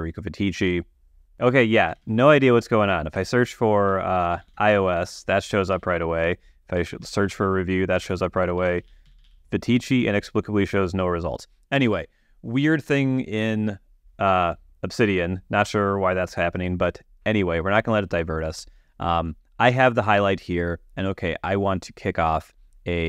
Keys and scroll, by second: 1.3 shift+v, 2.3 super+a, 2.4 super+BackSpace, 3.4-5.3 typing, 6.1 super+a, 7.0-10.1 typing, 8.4 super+w, 8.4 super+a, 12.2 super+a, 12.2 super+BackSpace.